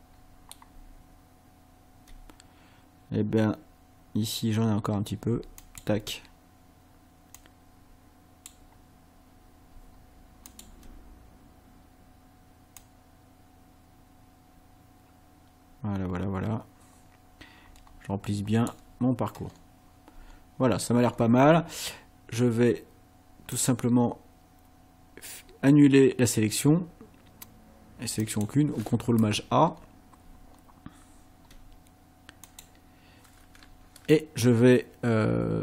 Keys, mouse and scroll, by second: 1.1 ctrl+scroll up 2, 5.6 ctrl+click, 7.4-8.7 drag, 10.5 ctrl+click, 12.8-18.9 drag, 19.5 scroll up 2, 20.7-21.5 ctrl+scroll down 4, 23.6 click, 28.3 click, 29.8 scroll up 2, 30.5 ctrl+scroll down 2, 32.5 click.